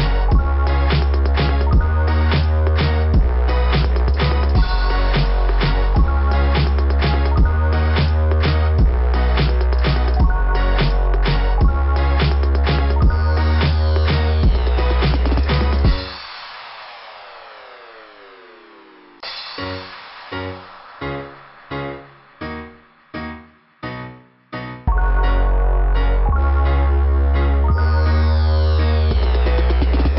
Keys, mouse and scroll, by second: 3.3 click, 7.4 click, 7.6 click, 7.9 click, 10.8 click, 10.9 click, 11.7 click, 12.0 click, 21.5 click, 25.1 click.